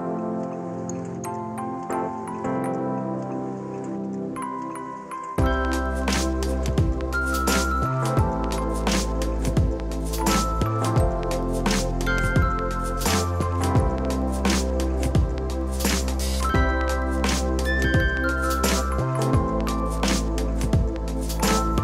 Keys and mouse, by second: 2.7 click, 3.2 click, 9.3 Escape, 9.4 click, 10.2 right click, 10.6 click, 11.1 ctrl+shift+x, 11.4 click, 12.2 KP_1, 12.3 Return, 14.9 c, 15.7 KP_6, 16.1 Return, 16.4 click, 20.3 KP_5, 20.4 Return.